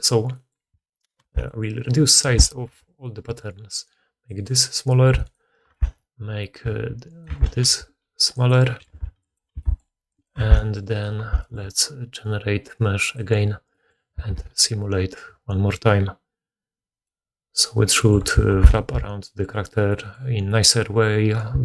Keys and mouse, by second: 1.1 2, 1.7 middle click, 1.7 right click, 2.2 Tab, 2.6 a, 3.2 s, 4.4 middle click, 4.9 Tab, 5.1 click, 5.2 right click, 5.6 Tab, 6.5 s, 7.2-8.5 middle drag, 7.2 a, 7.6 s, 8.8 g, 9.4 s, 10.3 Tab, 10.8 right click, 10.9 middle click, 11.1 1, 11.3-13.0 middle drag, 13.0-21.6 drag, 14.2 shift+space, 18.7 alt+q, 19.0 alt+a.